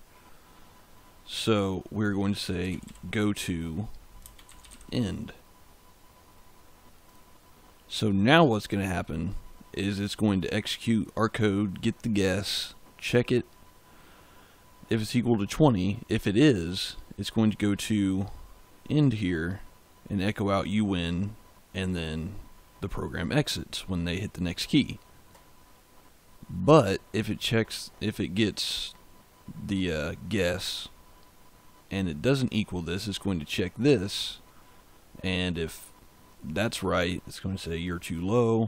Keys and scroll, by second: 2.1-5.1 typing.